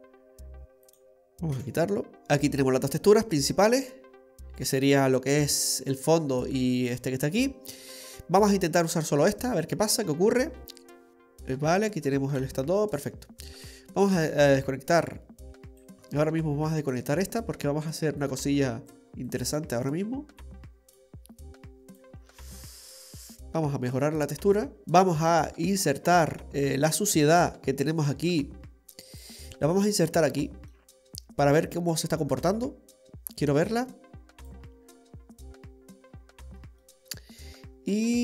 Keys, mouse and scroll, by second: 0.9 click, 2.1 middle click, 2.1-2.6 scroll down 7, 2.8 click, 3.7 click, 5.1 scroll up 2, 6.7-7.2 scroll up 2, 7.2 scroll down 1, 8.2 scroll down 4, 8.4 scroll up 2, 8.7 scroll down 2, 9.1-9.5 scroll up 1, 9.5 scroll down 1, 10.3-10.6 scroll down 2, 10.6 middle click, 13.0 middle click, 14.3 click, 16.0-16.4 scroll up 7, 16.6 middle click, 18.2 click, 19.3 click, 21.5 click, 22.7 scroll down 2, 22.9 middle click, 23.2 scroll up 1, 23.9 click, 24.8 middle click, 24.8 scroll down 5, 25.3 middle click, 26.0-26.5 scroll down 2, 26.4 middle click, 27.1-28.0 scroll up 1, 28.0-28.3 scroll up 2, 28.3 click, 29.8 scroll up 2, 30.0 middle click, 32.3 click, 36.5-36.9 scroll down 2, 36.8 middle click.